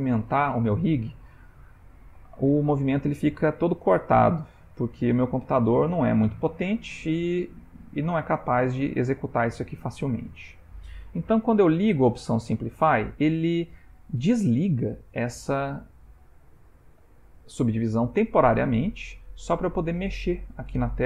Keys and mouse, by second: 10.4 click, 12.0 click, 15.4 r.